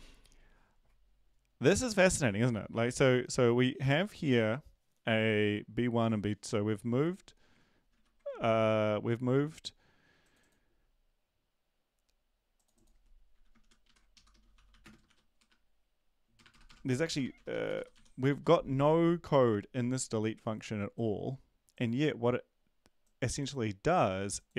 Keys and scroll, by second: 7.9 ctrl+`, 13.6 shift+Home, 13.8 shift+Right, 14.1 shift+Left, 14.3-17.9 typing, 18.3 ctrl+s.